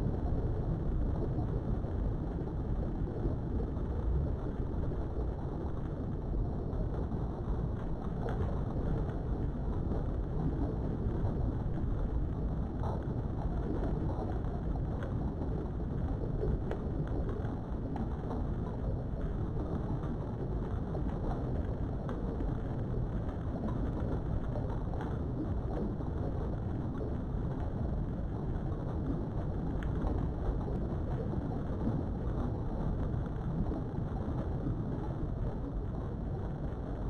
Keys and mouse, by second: 0.3 1, 1.4 click, 1.9 g, 3.2 click, 3.9 shift+middle click, 6.4 click, 6.7 g, 8.3 click, 8.8 click, 9.0 g, 10.3 click, 16.9-19.6 middle drag, 19.9 Tab, 21.6 middle click, 22.2 Tab, 22.7 middle click, 24.4 middle click, 26.5 alt+click, 27.2 middle click, 28.5 shift+click, 29.1 middle click, 30.1 shift+middle click, 31.3 g, 35.8 right click, 36.4 KP_3.